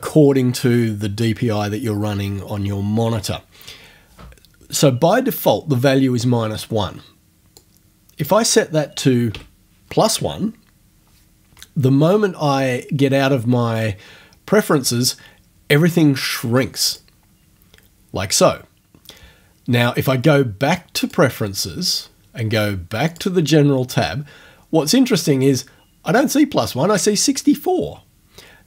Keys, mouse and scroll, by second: 7.6 click, 9.3 1, 16.9 click, 21.0 click, 23.1 click.